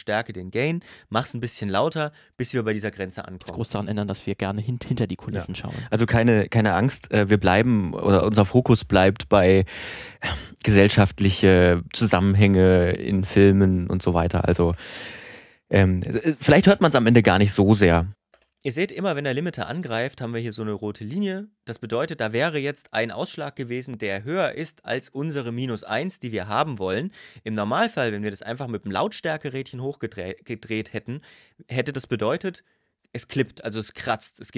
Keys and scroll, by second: 3.1 space, 14.4 space, 17.9 space.